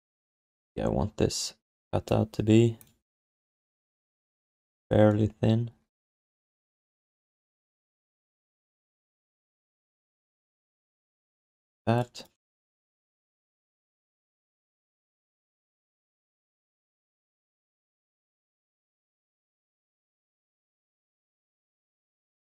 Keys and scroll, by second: 6.5 w, 12.7 q, 20.5 4.